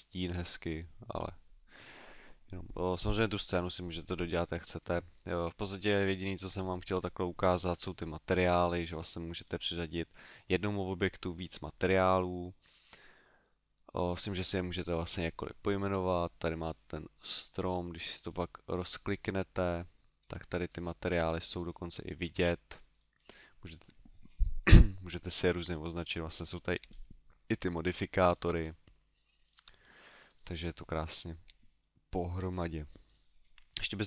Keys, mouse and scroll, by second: 7.7 Escape, 8.5 middle click, 9.0 middle click, 12.2 right click, 17.9 click, 18.9 click, 19.7-20.5 scroll down 2, 20.5 click, 21.5 click, 22.3 click, 22.9 click, 25.6 click, 26.0-26.9 scroll down 2, 26.9 scroll down 1, 27.6 click, 28.2 click, 28.5 scroll up 1, 29.4 click, 30.2 scroll down 2, 31.7 middle click, 32.3-33.0 scroll down 2, 33.0 right click, 33.0 scroll down 1.